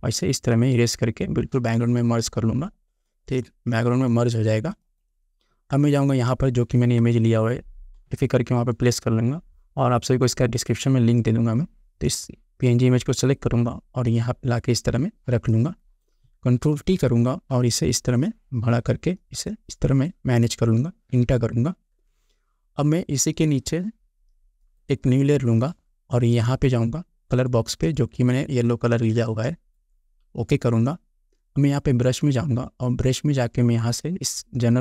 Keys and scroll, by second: 8.3 space, 16.9 ctrl+t, 21.3 Return.